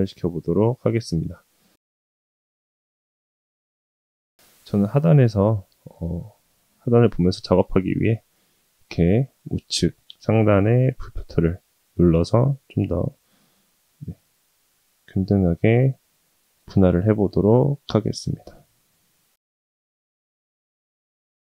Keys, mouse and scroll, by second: 1.7 middle click, 2.3 ctrl+r, 3.9-4.3 middle drag, 5.0-5.8 middle drag, 6.0-6.4 middle drag, 7.2-7.7 middle drag, 8.0-8.5 middle drag, 9.3 middle click, 12.5 click, 18.5 ctrl+r, 21.0 ctrl+r.